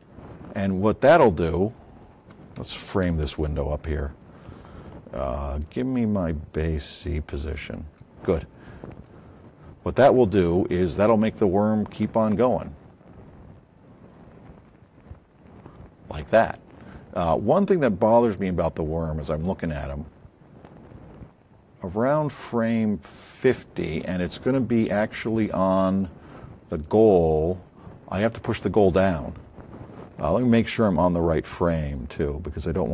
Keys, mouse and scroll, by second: 0.4 middle click, 0.8 middle click, 1.1 middle click, 1.4 middle click, 1.9 middle click, 3.1 a, 6.7 click, 7.7 a, 8.7 middle click, 9.0 middle click, 9.3 middle click, 9.7 middle click, 21.7-23.4 drag, 26.7 click, 30.8 scroll up 2.